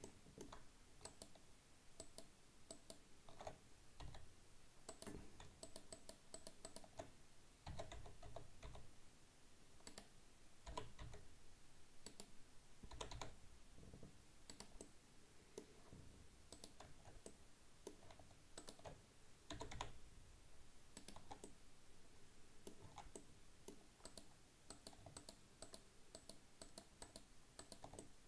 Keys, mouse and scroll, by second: 1.1 alt+shift+right click, 2.0 alt+shift+right click, 2.8 alt+shift+right click, 4.1 s, 5.7 shift+right click, 6.0 shift+right click, 6.4 shift+right click, 6.7 shift+right click, 7.7 s, 10.7 g, 13.0 g, 14.9-16.6 middle drag, 16.6 right click, 17.3-18.6 middle drag, 18.6 shift+right click, 19.6 g, 21.3 Tab, 21.5-22.9 middle drag, 22.9 Tab, 23.2 middle click, 24.1 right click, 24.7 right click, 25.2 shift+right click, 25.7 shift+right click, 26.2 shift+right click, 26.7 shift+right click, 27.1 shift+right click, 27.6 shift+right click, 28.0-28.2 middle drag.